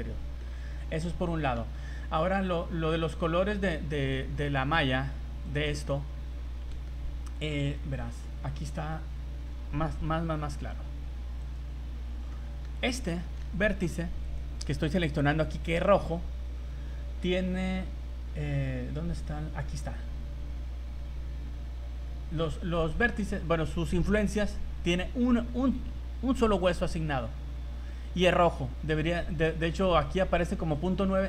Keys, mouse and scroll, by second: 0.9 scroll down 2, 1.2 middle click, 3.2 scroll down 2, 3.7 scroll up 4, 4.4 click, 5.9 scroll up 2, 6.8 shift+middle click, 7.1 scroll down 1, 8.5 click, 10.4 v, 11.2 v, 11.5 right click, 12.0 v, 12.3 middle click, 12.9 scroll up 2, 13.2 shift+middle click, 14.3 right click, 14.7 right click, 15.2 scroll up 2, 15.5 middle click, 16.3-16.8 scroll up 9, 16.8-17.8 scroll down 15, 17.9-18.5 scroll up 4, 26.8 scroll down 1, 27.3 middle click, 28.2 scroll up 1, 30.7 click.